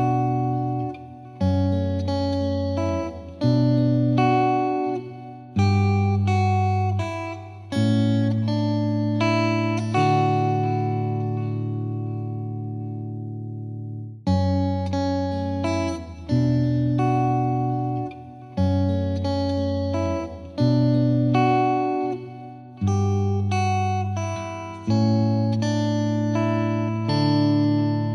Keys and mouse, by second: 0.0 Return, 3.7 click, 4.1 click, 8.9 click, 9.1 click, 12.1 click, 14.4 click, 15.8 click, 16.8 ctrl+t, 22.4 ctrl+click, 26.3 ctrl+click.